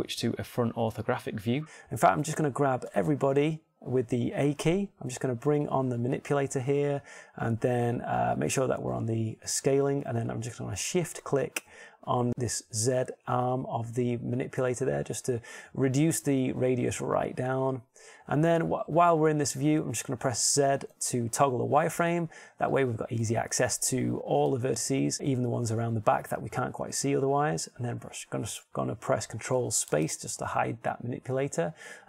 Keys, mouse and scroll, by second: 1.6 KP_1, 4.7 a, 6.7-9.4 drag, 12.3-13.7 drag, 22.7 z, 23.7 ctrl+Tab, 25.1 a, 25.7 b, 31.7 ctrl+space.